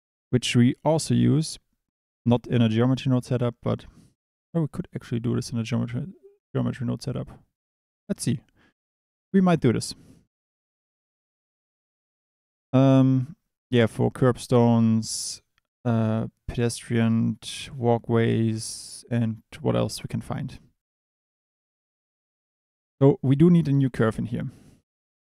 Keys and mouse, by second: 0.8 click, 9.2 click, 22.7 shift+a.